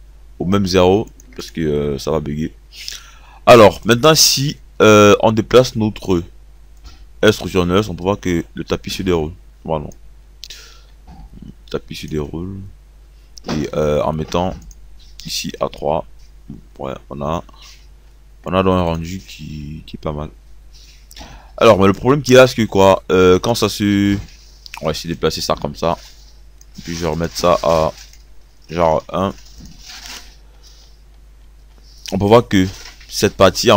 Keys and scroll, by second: 1.3 0, 28.4 KP_1.